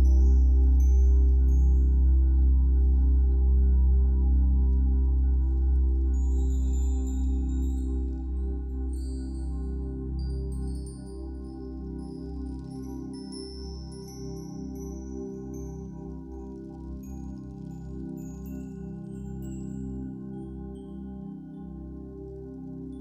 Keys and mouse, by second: 0.6 ctrl+l, 0.7 Return, 2.5 alt+a, 6.4 ctrl+s, 7.6 click, 10.4-13.4 drag, 10.7 space, 16.2-18.2 ctrl+alt+drag, 20.8 click, 21.8 ctrl+alt+click.